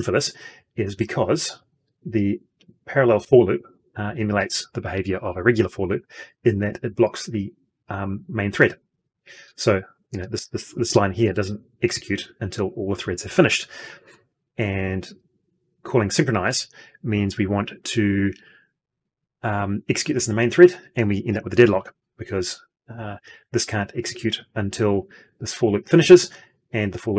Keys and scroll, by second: 2.4 ctrl+F2.